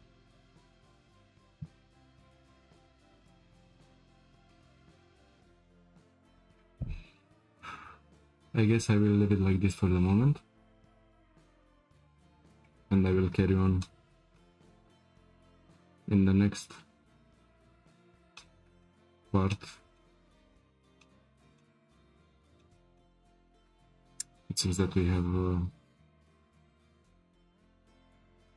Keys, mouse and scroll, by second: 2.8 scroll down 1, 3.2-4.0 middle drag, 4.0-4.4 scroll up 1, 4.4-6.3 shift+middle drag, 6.3-7.9 scroll up 1, 13.8-17.5 shift+middle drag, 18.3-22.1 middle drag, 22.1-22.6 scroll down 2, 22.6-26.1 shift+middle drag.